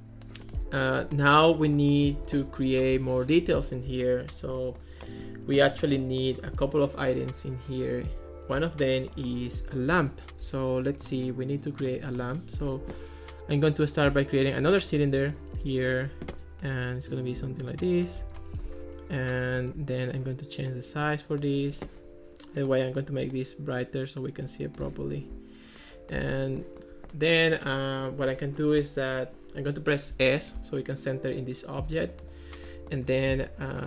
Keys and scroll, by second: 30.1 s.